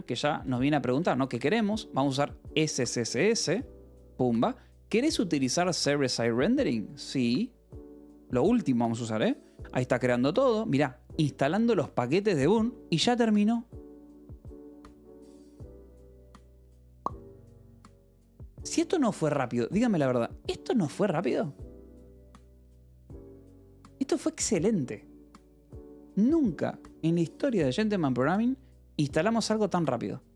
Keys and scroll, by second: 0.3 Down, 1.3 Up, 3.3 Return, 7.1 y, 7.6 Return.